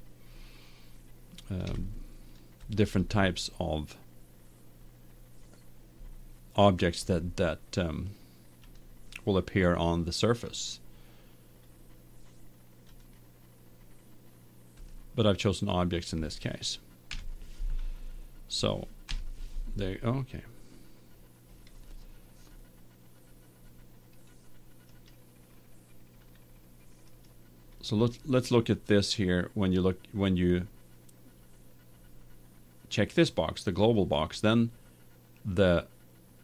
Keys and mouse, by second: 1.7-3.8 middle drag, 8.6-10.3 drag, 10.3-12.9 middle drag, 12.9-14.6 drag, 14.6 middle click, 14.9-16.5 drag, 17.1-18.4 middle drag, 17.3 KP_1, 20.9-22.4 middle drag, 22.6 middle click, 25.0-26.9 right drag, 27.2-29.0 right drag, 33.9-35.8 drag.